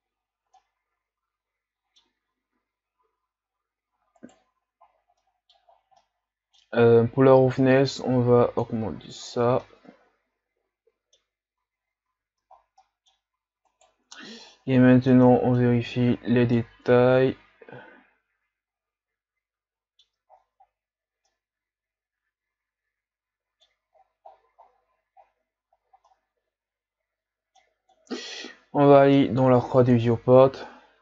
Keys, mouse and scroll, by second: 0.0-0.6 scroll up 1, 0.6-4.3 middle drag, 4.3-5.3 right drag, 7.7-8.9 drag, 8.9 a, 9.5 scroll down 2, 9.7-11.8 middle drag, 11.8-12.6 scroll up 3, 12.6-13.0 ctrl+scroll down 4, 13.0 middle click, 13.2-13.7 scroll up 3, 13.7-16.5 right drag, 16.7-19.5 middle drag, 20.3-20.7 scroll down 5, 20.7-21.1 scroll up 4, 21.5-24.1 middle drag, 24.1-26.2 scroll down 16, 26.2-30.0 middle drag, 30.0 click, 30.9 scroll down 2.